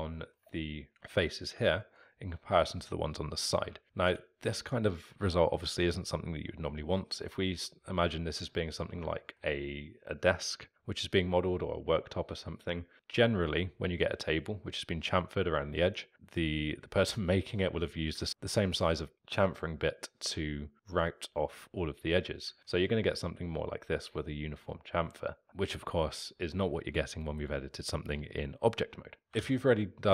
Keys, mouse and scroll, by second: 4.1 Tab, 7.4-26.2 alt+middle drag, 26.2 click, 29.2 ctrl+z, 29.4 ctrl+z, 29.7 ctrl+z.